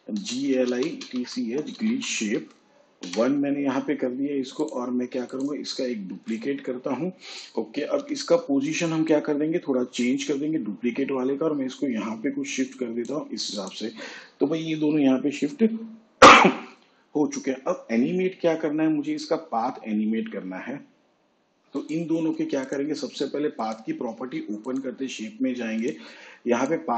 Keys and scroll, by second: 0.1 Return, 1.4-4.2 typing, 7.5 ctrl+d, 9.4 p.